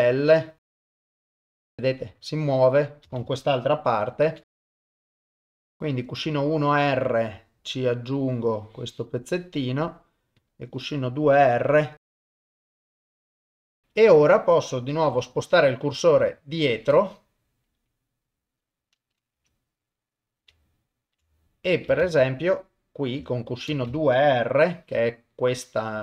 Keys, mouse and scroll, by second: 0.6 click, 1.4 shift+middle click, 1.5 shift+space, 3.1 shift+space, 4.3 shift+Left, 4.5 click, 4.8 shift+middle click, 4.9 click, 5.1 shift+space, 5.5 shift+space, 5.6 shift+Left, 5.7 shift+middle click, 6.4 click, 8.0-9.1 drag, 12.0 click, 12.3 ctrl+z, 12.4 click, 12.7 shift+space, 12.8 shift+space, 12.9 shift+Left, 13.0 click, 13.3 shift+space, 13.7 shift+space, 13.9 shift+Left, 15.1 KP_7, 16.7 shift+right click, 19.3 KP_0, 20.6 ctrl+middle click, 21.3 shift+middle click, 22.0 shift+space, 23.7 shift+space, 24.6 shift+Left.